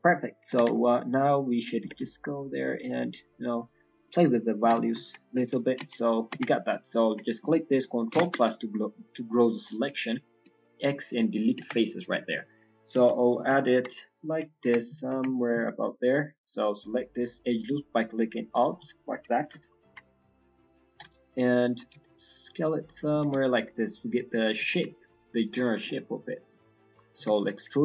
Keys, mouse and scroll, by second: 0.1-0.4 scroll up 1, 0.7 g, 1.7 s, 6.0 middle click, 6.3 Tab, 6.8 click, 8.1 ctrl+KP_Add, 10.4 x, 11.7 middle click, 12.9 KP_1, 13.3 KP_3, 13.6 KP_1, 14.0 scroll up 1, 14.4 Tab, 14.7 Tab, 16.0 alt+click, 17.2 middle click, 18.0 alt+click, 18.8 scroll down 2, 19.2 KP_1, 19.4 KP_3, 19.8 KP_1, 20.8 scroll up 1, 20.8 g, 21.9 s, 25.8 shift+middle click, 27.1 e.